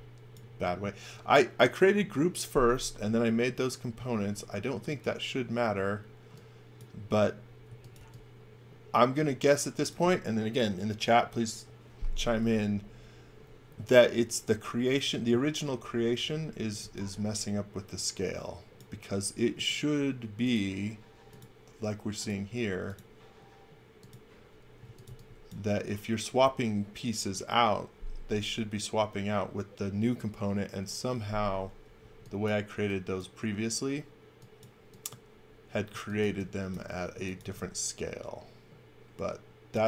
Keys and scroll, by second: 4.1 space, 7.7 x, 8.0 v, 16.5 x, 16.8 v, 18.9 space, 24.6-25.5 typing, 32.0 e, 35.9 x, 36.2 v, 37.1 x, 37.4 v.